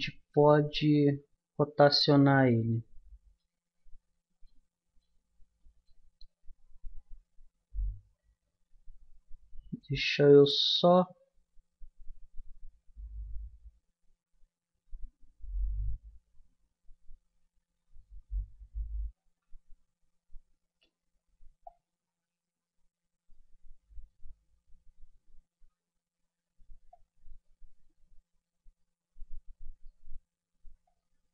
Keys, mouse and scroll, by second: 2.3-4.0 middle drag, 4.4-11.9 middle drag, 16.5-20.4 middle drag, 21.6-23.1 drag, 26.9-28.8 drag, 30.8-31.3 drag.